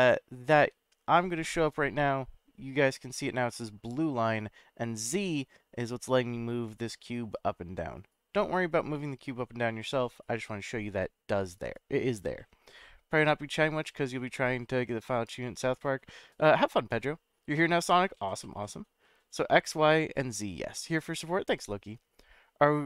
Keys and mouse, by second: 0.4 g, 0.6 z, 11.5 right click.